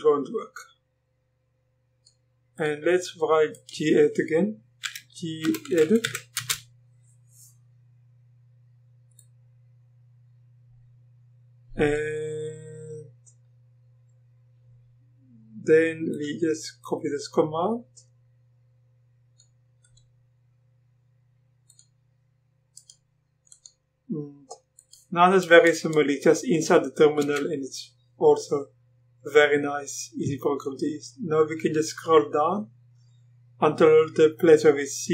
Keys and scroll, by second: 4.8-6.5 typing, 27.2 Return.